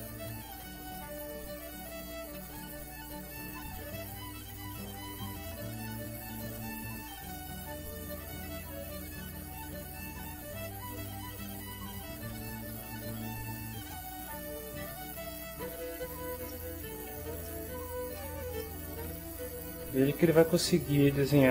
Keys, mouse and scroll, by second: 1.1 click, 3.8-5.6 right drag, 6.4 click, 7.6-9.0 drag, 10.6-11.7 drag, 12.2 click, 13.3-14.7 right drag, 14.8-16.4 right drag, 16.7 middle click, 17.4 ctrl+middle click, 18.0 ctrl+shift+click, 18.7-20.1 ctrl+shift+drag, 20.4-21.5 middle drag.